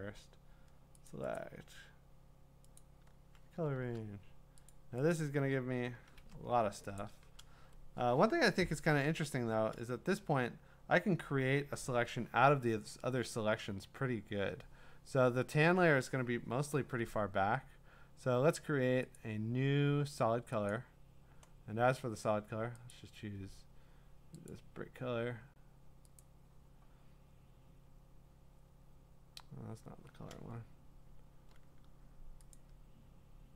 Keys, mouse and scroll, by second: 1.4 click, 2.8 click, 4.7 click, 5.1 click, 6.2 Escape, 7.0 click, 10.2-10.9 scroll, 19.2 click, 20.7 click, 22.9 click, 24.5 click, 26.2 click, 27.8 scroll, 28.7 scroll, 29.3 scroll, 32.5 click.